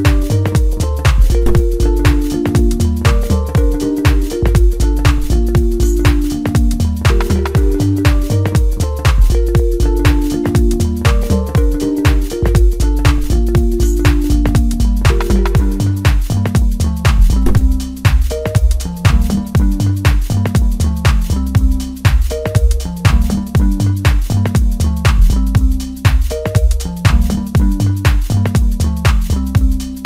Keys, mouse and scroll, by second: 1.0 e, 4.5 e, 4.9 s, 6.9 e, 7.3 s, 11.1-11.4 scroll up 2, 11.4-12.4 middle drag, 12.4-12.9 scroll up 1, 13.7 e, 14.1 s, 16.3 e, 17.4 e, 19.1 e, 20.8 e, 21.3 s, 22.9 e, 24.2 e, 27.1 e, 28.5 i, 29.9 i.